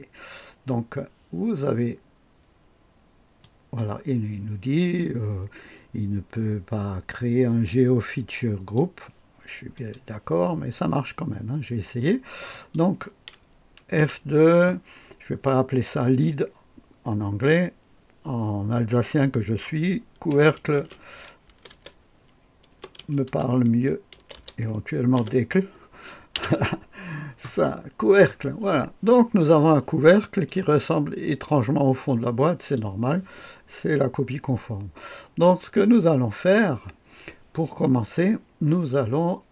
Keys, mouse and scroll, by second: 3.3 click, 9.7 click, 10.3 click, 12.4 click, 13.9 F2, 20.5-25.1 typing, 26.3 Return, 30.4-32.7 drag, 32.8 click.